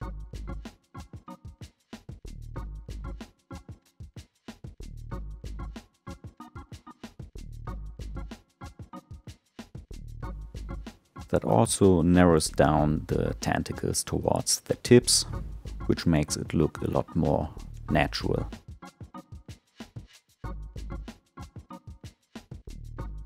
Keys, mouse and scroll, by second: 1.0 s, 14.8 Tab, 15.6 click, 17.1 click, 17.9-20.9 middle drag, 21.3 click.